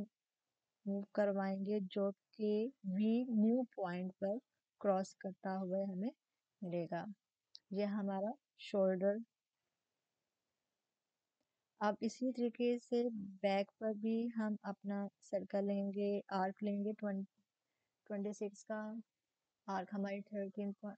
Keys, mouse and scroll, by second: 6.8-13.9 alt+drag, 8.7 typing, 19.0 click, 19.0-20.9 drag.